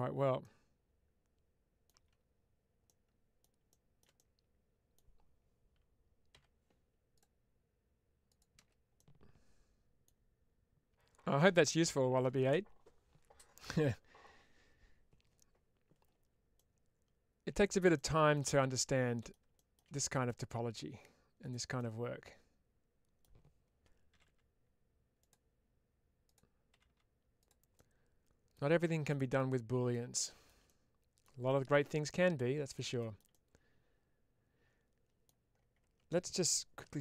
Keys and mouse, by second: 0.3-1.7 middle drag, 2.0 Tab, 2.7 middle click, 4.0 middle click, 8.8-9.9 middle drag, 16.4-17.5 middle drag, 18.2 middle click, 19.8 middle click, 21.3 click, 21.6-23.1 middle drag, 25.1 click, 26.1-27.3 drag, 27.6 middle click, 29.1 middle click, 30.6 middle click, 31.8 middle click.